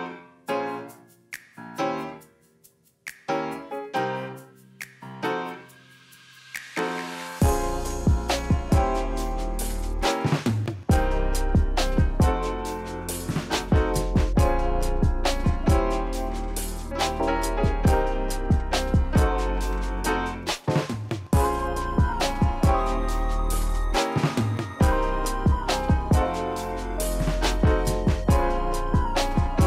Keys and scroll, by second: 1.5 ctrl+s, 4.2 ctrl+alt+shift+c, 13.4 q, 22.6 Return, 27.4 ctrl+alt+shift+c.